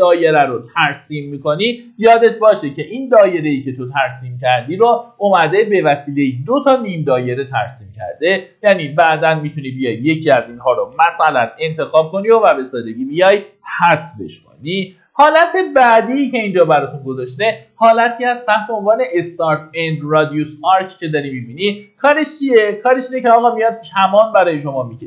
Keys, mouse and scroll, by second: 2.0 Escape, 3.6 click, 10.6 Delete, 13.6 middle click, 14.2 typing, 21.0 scroll down 1, 21.7 middle click, 22.6-23.5 scroll up 1, 23.7 Escape, 24.4-25.0 drag.